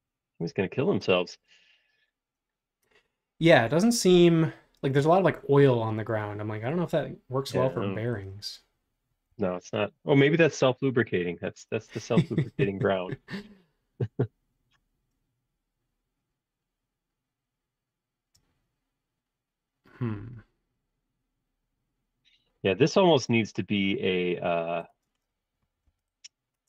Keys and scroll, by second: 0.4 Right, 9.3 a, 25.1 space, 25.8 e.